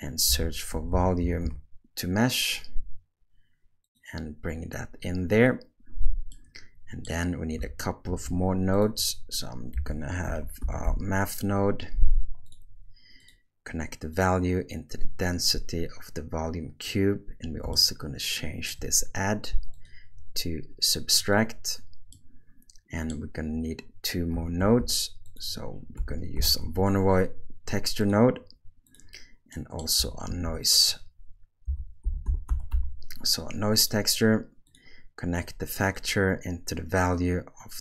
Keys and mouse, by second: 6.4 middle click, 8.1 shift+a, 14.1 click, 14.3-16.9 drag, 17.7-18.7 ctrl+middle drag, 19.8-21.3 drag, 22.1-23.1 middle drag, 24.6 shift+a, 29.6 middle click, 30.4 shift+a, 35.9 click.